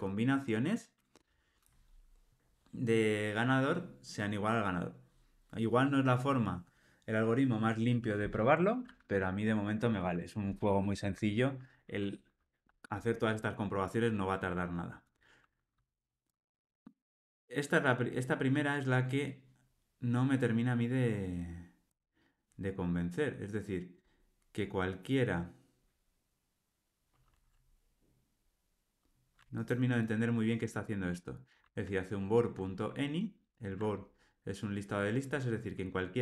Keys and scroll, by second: 33.1 super+b.